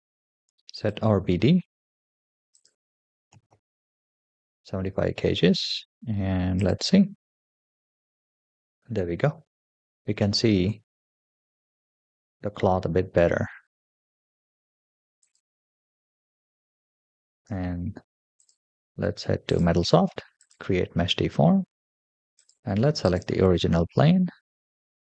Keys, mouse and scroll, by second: 0.6-1.0 drag, 1.3-1.8 scroll down 3, 2.3-3.7 drag, 6.4 click, 10.1-10.5 middle drag, 11.1-11.9 scroll up 3, 12.8 scroll down 3, 13.8 space, 15.0 click, 15.8 space, 17.1 space, 18.2 click, 19.4 click, 20.2-21.1 drag, 21.5-22.2 scroll down 3, 22.2-23.3 drag, 23.7-24.1 scroll down 3.